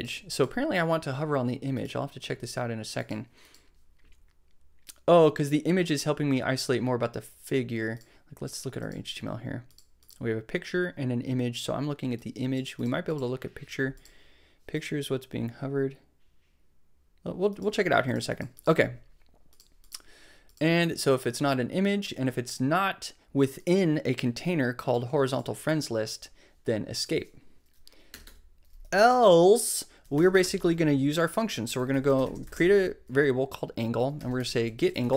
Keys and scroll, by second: 28.1 Return, 29.7-35.1 typing.